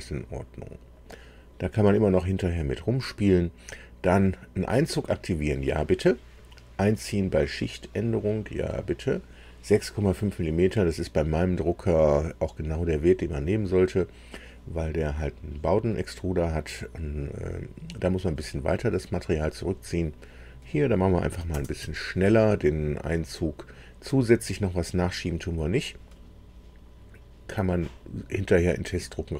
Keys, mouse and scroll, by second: 7.9 click, 20.3 click, 21.3 KP_4, 21.5 KP_0, 21.8 Tab.